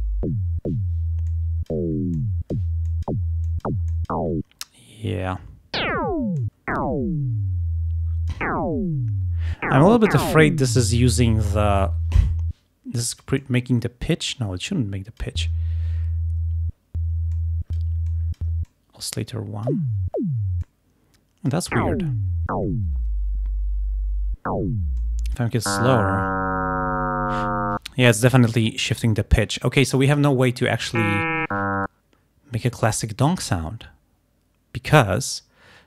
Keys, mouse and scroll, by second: 1.3 click, 2.2 click, 2.9 click, 3.6 click, 4.0 click, 4.7-6.0 drag, 6.4-8.6 drag, 13.2-15.5 drag, 17.4 click, 18.2 click, 18.7-19.9 drag, 20.7-21.7 drag, 25.1 click.